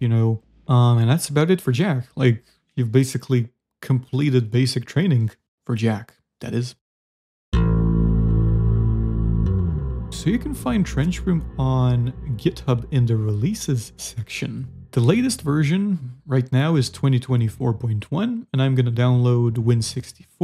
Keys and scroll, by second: 0.0 z, 1.2 shift+s, 4.7 z, 5.3 Escape.